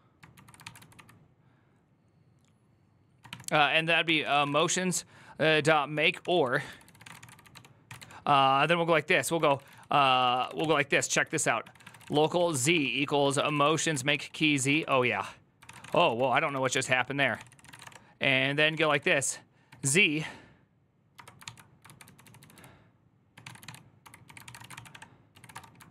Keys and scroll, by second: 0.0-1.2 typing, 3.1-16.5 typing, 17.0 Tab, 17.1 ctrl+c, 17.5 ctrl+:, 17.5-25.9 typing, 17.6 Return, 21.2 ctrl+c.